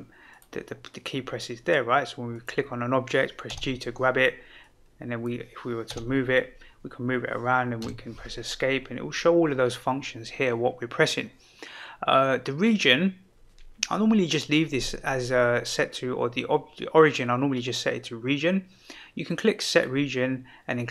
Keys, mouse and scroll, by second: 0.3 click, 2.3 click, 3.4 g, 4.6-5.3 drag, 5.9 g, 7.8 Escape, 19.7-20.9 drag.